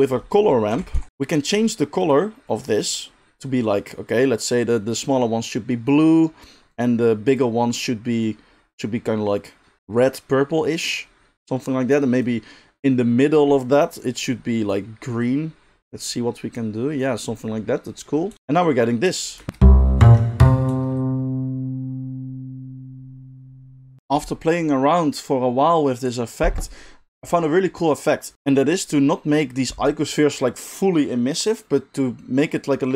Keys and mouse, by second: 1.1 middle click, 2.0 click, 2.7-6.8 middle drag, 6.8 click, 7.4-11.3 middle drag, 11.3-14.7 drag, 14.7-19.1 middle drag, 19.1-32.9 drag, 19.4 space.